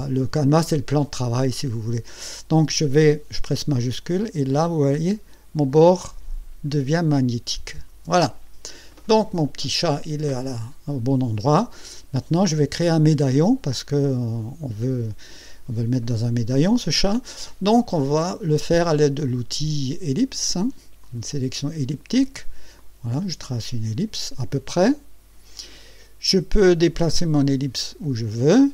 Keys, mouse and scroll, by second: 3.8-7.8 shift+drag, 21.0 click, 22.8-26.1 drag, 27.0-28.4 drag.